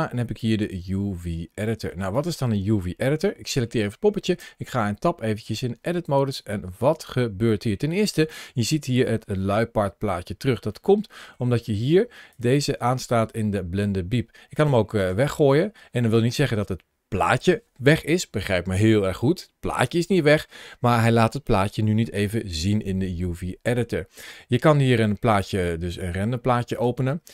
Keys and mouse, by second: 1.5 middle click, 2.0 click, 4.3 Tab, 10.5 middle click, 12.2-14.4 drag, 14.8 click.